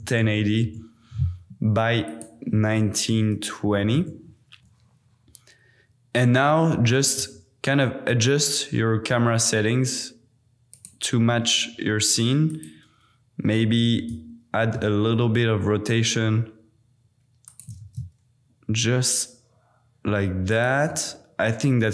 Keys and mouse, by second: 2.0-4.0 drag, 6.9 g, 7.1 z, 10.7 click, 11.2 g, 11.5 y, 12.5 click, 13.8 r, 14.3 x, 17.5 shift+click, 17.7 g, 17.8 z, 20.5 shift+click.